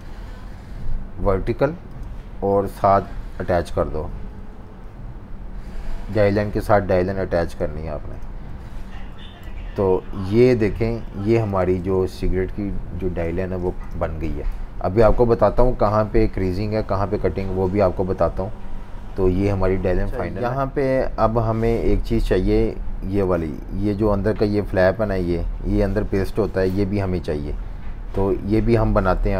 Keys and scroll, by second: 2.7 typing, 4.1 super+y, 4.7 v, 9.0 super+y, 9.5 super+-, 9.6 super+-, 11.6 typing, 13.4 typing, 21.4 F18.